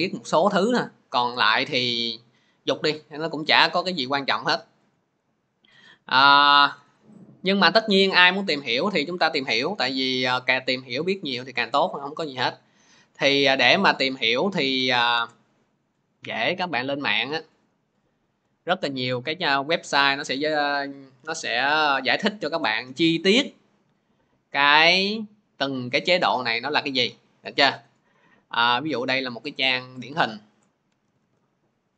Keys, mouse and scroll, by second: 6.2 click, 11.9 alt+Tab, 13.7 alt+Tab, 14.5 alt+Tab, 15.0 alt+Tab, 17.5 click, 18.2-19.8 scroll, 21.0-21.4 scroll, 22.8-23.5 scroll, 24.1-28.1 scroll, 28.5-29.2 scroll, 29.9 click, 30.9 ctrl+c, 31.0 ctrl+c.